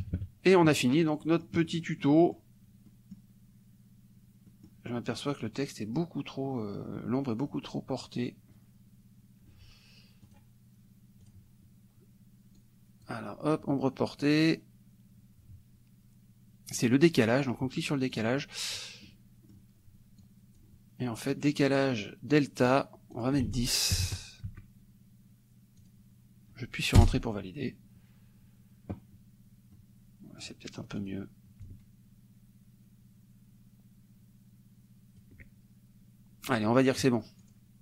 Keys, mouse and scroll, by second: 0.1 KP_Subtract, 1.3 click, 1.7 click, 2.9 click, 4.5 click, 10.3 click, 11.3 click, 12.6 click, 16.8 click, 18.2 click, 19.1 middle click, 20.3 click, 23.2 click, 23.5 ctrl+a, 24.1 ctrl+KP_0, 25.8 click, 27.0 Return, 29.8 middle click, 31.0 click, 31.7-35.4 ctrl+drag, 37.5 click.